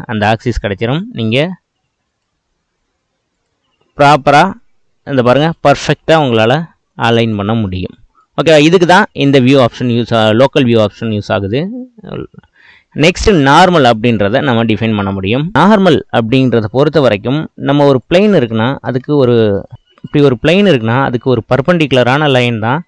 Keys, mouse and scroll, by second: 3.3-4.6 drag, 8.5-9.9 middle drag, 9.9-13.1 drag, 13.9-15.1 middle drag, 15.1 click, 15.6-18.0 middle drag, 18.0 click, 19.0 Tab, 19.4 middle click, 19.8 click, 20.2-21.3 middle drag, 21.3-21.7 scroll up 1.